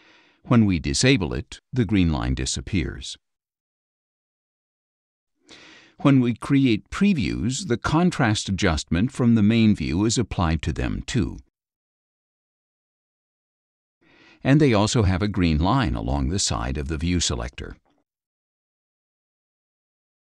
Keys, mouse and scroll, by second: 0.9 F12, 1.6 F12, 2.3 F12, 3.8 F12, 6.0 click, 7.4-8.8 drag, 9.5 click, 10.2-11.3 drag, 12.3 click, 13.4 click, 20.2 click.